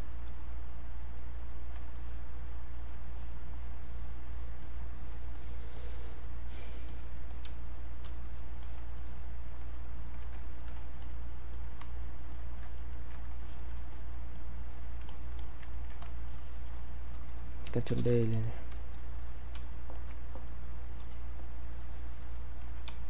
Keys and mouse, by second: 1.7 space, 1.9 alt+click, 7.5 space, 7.8 click, 8.0 space, 8.2 click, 10.4 ctrl+right click, 11.0 click, 12.3 alt+click, 12.8 ctrl+right click, 13.5 alt+click, 15.4 alt+click, 15.7 ctrl+right click, 16.3-18.0 shift+drag, 18.0 ctrl+d, 18.4 click, 18.9 shift+click, 19.6 space, 21.1 click, 22.9 space.